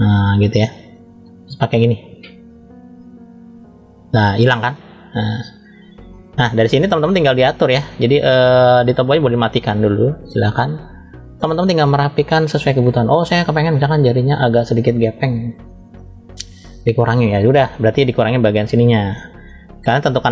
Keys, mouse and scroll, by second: 1.6 click, 2.9 click, 3.7 click, 4.6 middle click, 5.5 shift+middle click, 6.4 scroll down 1, 7.0 middle click, 7.0 scroll down 2, 8.9 click, 11.1 scroll up 1, 11.9-12.3 scroll up 1, 12.4 shift+middle click, 13.2-14.7 middle drag, 15.7 click, 17.9 f, 19.4-20.3 middle drag.